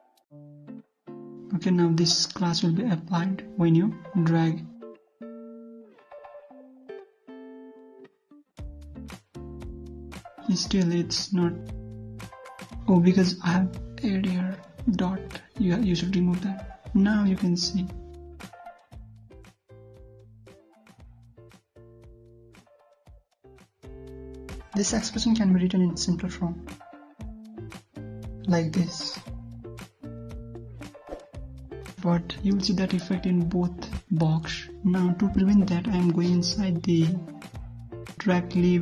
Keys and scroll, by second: 0.8 ctrl+v, 7.7 ctrl+s, 8.4 alt+Tab, 8.6 ctrl+F5, 13.5 alt+Tab, 16.1 ctrl+s, 16.6 ctrl+F5, 23.1 alt+Tab, 31.0 alt+Tab, 36.7 alt+Tab, 38.2 ctrl+c.